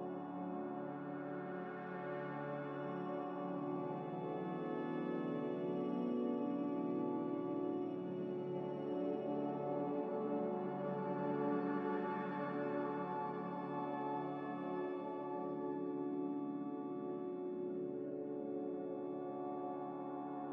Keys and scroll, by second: 1.0 5, 11.5-12.0 typing.